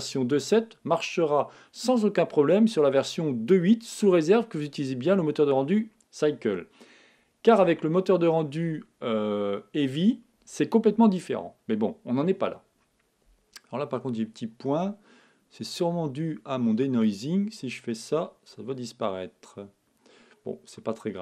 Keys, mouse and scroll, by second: 15.6-18.9 drag, 20.3 middle click, 21.0-21.2 scroll up 1.